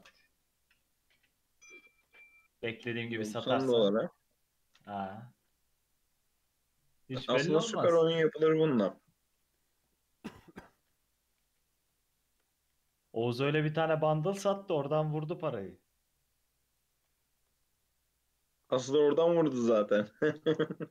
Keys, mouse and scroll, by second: 0.0 ctrl+r, 2.0 ctrl+r, 5.3 scroll down 1, 5.5-6.1 middle drag, 6.1-6.9 scroll down 3, 6.5 Tab, 6.9-7.6 middle drag, 7.6 scroll up 2, 7.8 Tab, 8.1-10.2 middle drag, 10.2 KP_7, 11.4 alt+z, 12.1-12.4 shift+middle drag, 12.4-12.8 scroll down 2, 12.8 1, 13.0-13.7 scroll down 1, 13.7-14.4 shift+middle drag, 14.4 click, 15.4-15.9 scroll up 2, 15.9 click, 17.1 alt+z, 17.5 Tab, 17.8-18.6 middle drag, 18.6-19.0 scroll up 2, 19.0-20.2 middle drag, 20.2 click, 20.4-20.9 right drag.